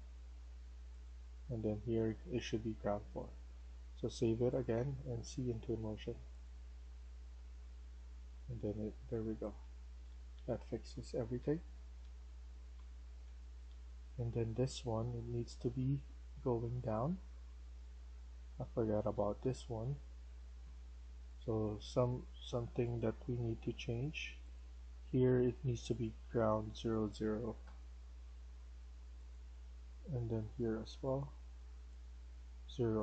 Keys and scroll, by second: 0.0 Escape, 2.6 Escape, 9.3-15.5 typing, 17.3-20.2 typing, 24.0 Escape, 25.3 Escape, 27.5 0, 32.2 0.